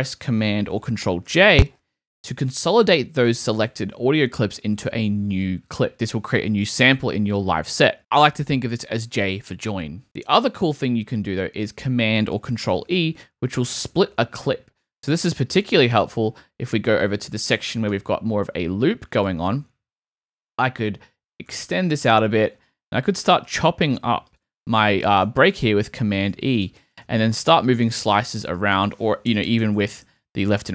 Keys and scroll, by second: 1.2 super+j, 10.0 super+z, 12.7 super+r, 23.4 super+r, 25.5 super+e, 29.3 Left.